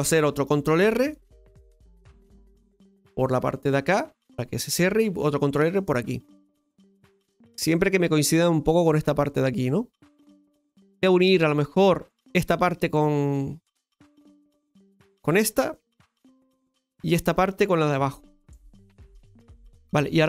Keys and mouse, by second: 12.1 right click, 15.1 shift+right click, 16.1 f, 17.2 right click, 18.1 shift+right click.